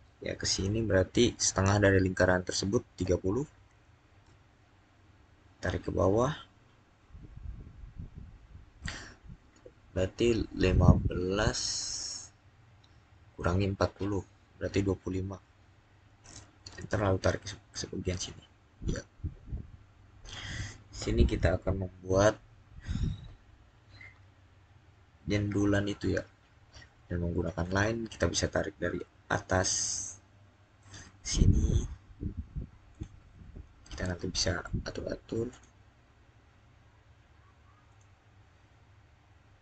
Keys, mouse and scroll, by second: 1.4 click, 2.8-3.4 typing, 4.1 Return, 15.0-15.9 typing, 16.4 Return, 18.0 click, 19.3 scroll up 1, 27.4-28.6 scroll up 1, 30.6 click, 32.8 click, 35.3 click, 37.7 click.